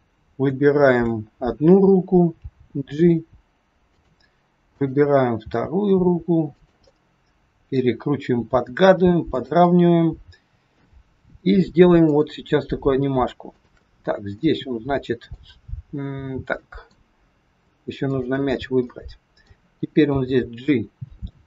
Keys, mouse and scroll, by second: 2.4 g, 4.7 click, 6.8 middle click, 8.4 r, 9.6 middle click, 11.9 click, 13.6 shift+click, 14.4 middle click, 16.6 middle click, 17.9 shift+click, 18.9 middle click, 19.9 g.